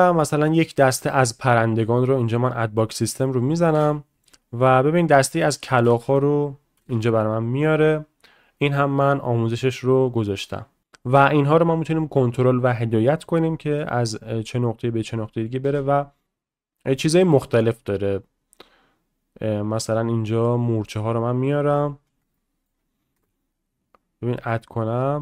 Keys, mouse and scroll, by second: 0.0 click, 2.3 click, 3.4 click, 3.7 space, 5.6 click, 10.8 space, 13.2 middle click, 15.3 middle click, 15.6 space, 16.2 ctrl+z, 16.9 click, 20.4-21.3 drag, 22.4-22.7 shift+middle drag, 23.1 space.